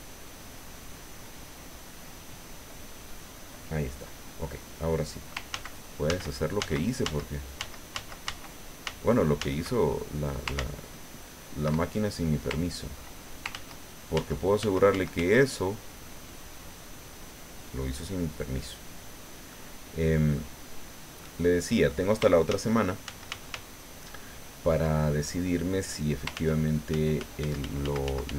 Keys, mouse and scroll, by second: 5.5 ctrl+z, 10.0 ctrl+click, 10.5 ctrl+z, 13.5 ctrl+z, 19.5-20.5 drag, 20.7 scroll up 2, 21.2 click, 22.5 ctrl+z, 26.3 ctrl+z.